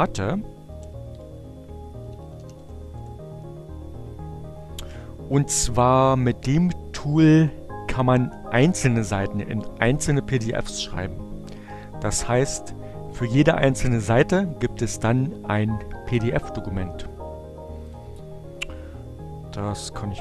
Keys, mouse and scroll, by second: 0.0-2.0 typing, 3.2 Return, 12.5 click, 16.8 click, 19.1 p.